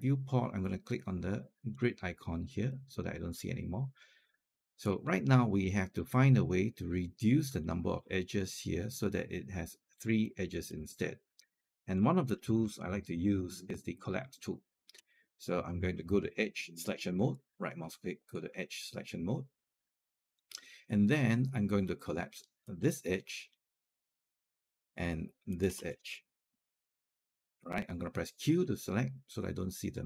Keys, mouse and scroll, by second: 1.4 click, 2.5 alt+click, 4.8 scroll up 1, 5.1 alt+middle click, 5.4 alt+click, 6.0-7.2 scroll down 1, 7.4 alt+click, 10.1 alt+click, 11.0 scroll up 1, 11.7 alt+click, 17.2 right click, 22.5 click, 25.3 shift+click, 28.3 q.